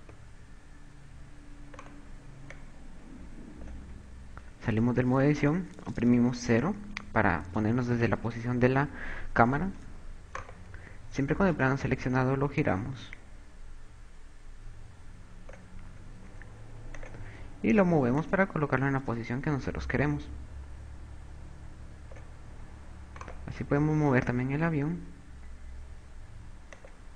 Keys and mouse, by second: 0.2 click, 2.6 right click, 3.6 click, 5.0 Tab, 6.7 KP_0, 10.6 a, 11.0 right click, 13.5 click, 17.7 click, 19.1 click, 23.3 a, 23.8 right click, 24.8 g.